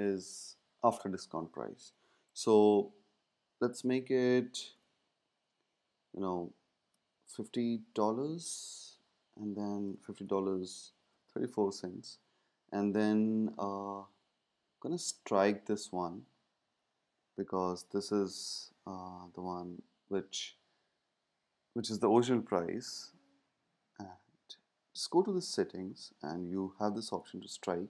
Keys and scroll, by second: 4.7 shift+4, 6.9-7.8 typing, 10.8-11.7 typing, 14.5-15.3 typing.